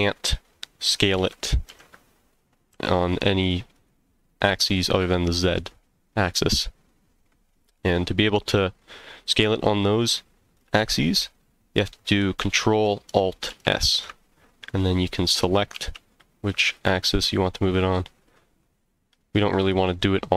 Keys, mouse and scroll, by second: 1.2 z, 1.7 x, 2.7 y, 3.7 right click, 13.5 ctrl+alt+s, 15.7 x, 19.6 right click, 19.9 middle click.